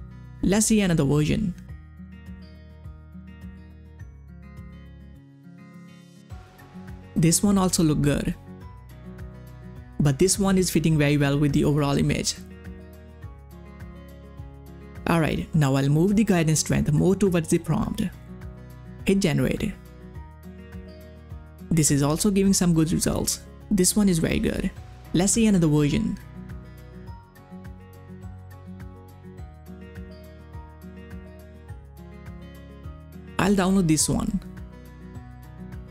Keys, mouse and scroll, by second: 1.1 click, 3.1 click, 3.1 click, 6.0 click, 6.1 click, 8.1 click, 8.2 click, 13.6 click, 13.7-18.6 drag, 21.6 click, 21.6 click, 22.7 click, 25.4 click, 27.8 click, 27.8 click, 30.3 click, 30.3 click, 33.4 click, 33.4 click, 34.4 click, 35.7 click.